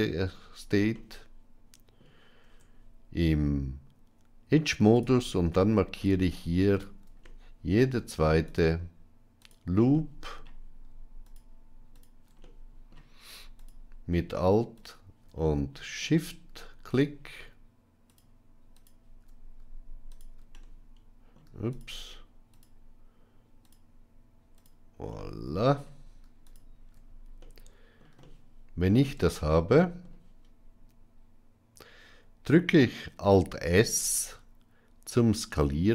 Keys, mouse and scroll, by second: 0.8-1.9 middle drag, 2.3 Tab, 5.8 alt+shift+click, 7.1 middle click, 9.8 middle click, 11.8 alt+shift+click, 12.3 middle click, 13.4 alt+shift+click, 14.7 alt+shift+click, 15.3 middle click, 17.9 alt+shift+click, 20.5 middle click, 21.6 alt+shift+click, 22.4 alt+shift+click, 23.5 alt+shift+click, 24.4 alt+shift+click, 25.0 middle click, 27.3 middle click, 28.1 shift+middle click, 28.9-29.9 middle drag, 33.5 alt+s.